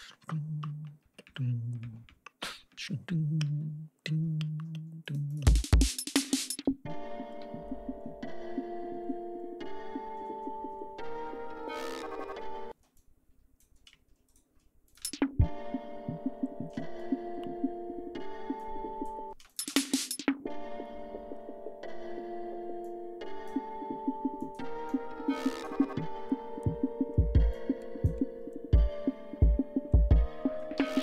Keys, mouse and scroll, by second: 4.1 g, 5.0-5.5 drag, 5.4 space, 5.7 ctrl+scroll down 2, 7.4 ctrl+scroll down 2, 8.8-9.2 scroll down 2, 9.3-9.8 scroll up 2, 9.9 scroll down 2, 10.3 scroll up 2, 12.1 ctrl+scroll up 2, 12.7 ctrl+space, 12.9 ctrl+click, 14.2 shift+right click, 14.8 shift+click, 14.9 shift+space, 18.5 click, 19.3 space, 19.4 click, 20.5 ctrl+scroll down 2, 21.3 ctrl+scroll up 2, 22.7 click, 24.3 click, 24.8 click, 26.2 ctrl+scroll down 2, 26.4 ctrl+scroll up 2, 27.4 click, 28.4 ctrl+scroll down 2, 28.7 ctrl+scroll up 2, 29.4 ctrl+scroll down 2, 29.8 ctrl+scroll up 2, 30.7 d.